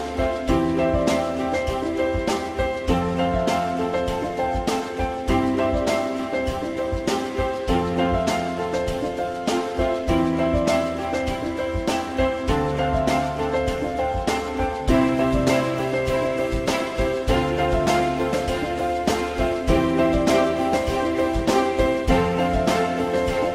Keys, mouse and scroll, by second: 5.1 ctrl+z, 9.9 shift+click, 14.8 e, 17.0 u.